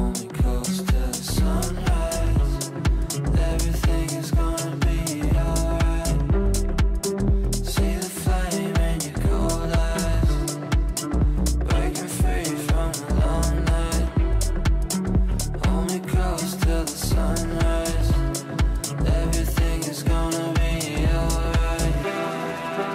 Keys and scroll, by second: 17.2 Delete.